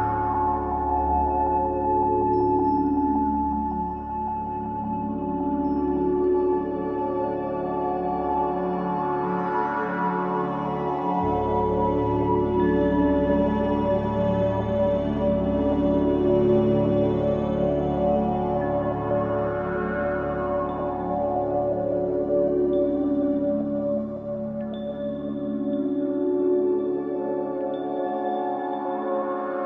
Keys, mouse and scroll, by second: 3.6 click, 4.8-5.7 scroll down 3, 5.7-6.5 scroll down 2, 6.5 g, 10.6 r, 15.4-19.8 drag, 19.9-24.5 middle drag, 24.5 click, 26.6 click, 27.8-28.3 scroll up 4.